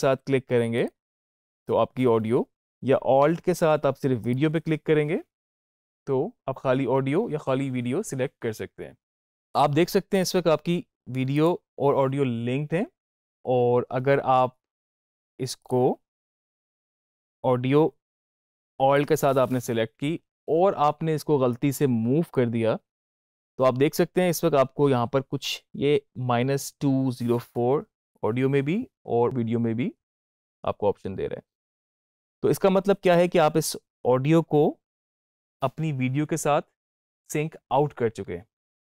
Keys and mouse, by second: 3.5 alt+click, 4.1 alt+click, 15.5 click, 18.9 alt+click, 21.4-24.5 drag.